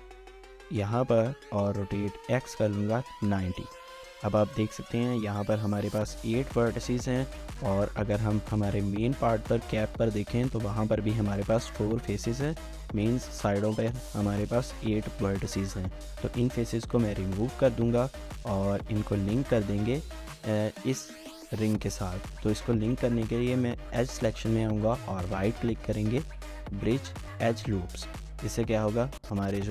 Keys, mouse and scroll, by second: 1.0 scroll up 1, 1.3-3.1 typing, 3.2 Return, 3.9 scroll up 1, 7.0 3, 7.7 shift+click, 16.3 Delete, 18.3 1, 18.6 alt+click, 20.7 ctrl+z, 21.3 alt+shift+click, 24.9 right click.